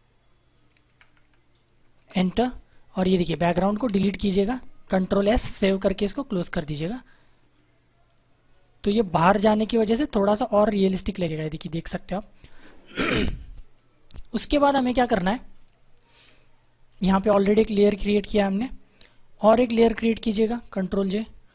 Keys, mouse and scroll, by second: 1.9 Return, 3.3 click, 5.1 ctrl+s, 6.2 click, 16.0 Down, 16.8 click, 20.6 ctrl+j.